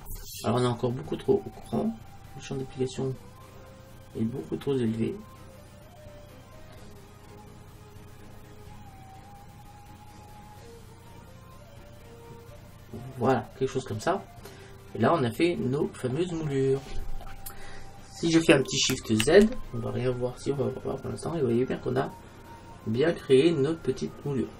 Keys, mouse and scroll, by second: 13.9-15.3 middle drag, 15.3 middle click, 15.5 middle click, 16.6 middle click, 17.3-18.3 middle drag, 19.3 shift+z, 23.8 middle click.